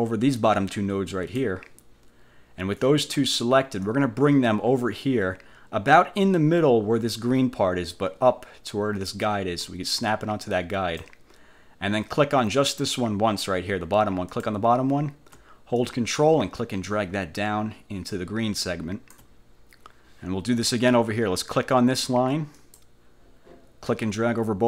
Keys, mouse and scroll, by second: 4.0-11.3 drag, 14.4 click, 15.9-19.4 ctrl+drag, 22.7 click, 24.0-24.6 drag.